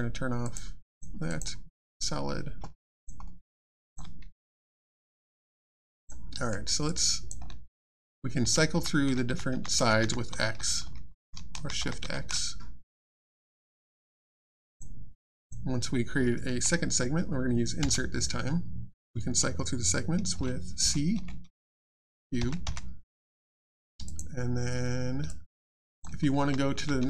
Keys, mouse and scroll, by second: 0.9 click, 2.7 alt+click, 3.2 alt+middle click, 3.7 alt+click, 4.2 click, 4.2 Tab, 5.4 click, 5.8 alt+click, 6.3 alt+middle click, 6.5 alt+scroll down 1, 6.9 alt+click, 11.5 x, 14.7 click, 20.8 c, 24.0 click, 25.3 alt+click.